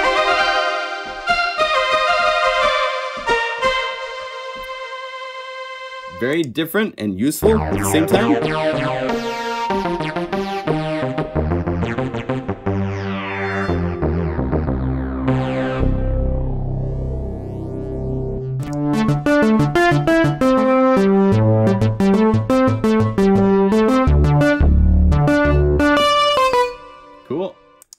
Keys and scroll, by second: 0.2 F4, 1.1 F4, 2.0 F4, 9.8 F4, 10.3 F4, 19.7 F4.